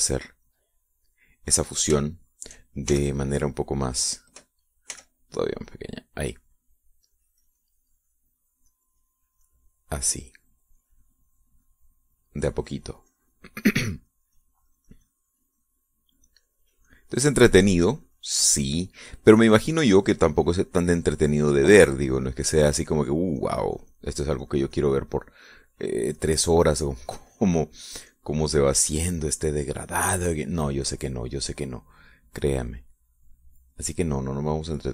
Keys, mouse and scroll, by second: 0.2 click, 1.1-2.3 drag, 3.0 shift+click, 3.9 shift+f, 4.9 click, 5.9 f, 6.6 click, 8.1-18.5 drag, 18.8 click, 20.4-22.3 drag, 22.3-26.5 drag, 27.2-31.1 drag, 32.5 click, 33.9 click.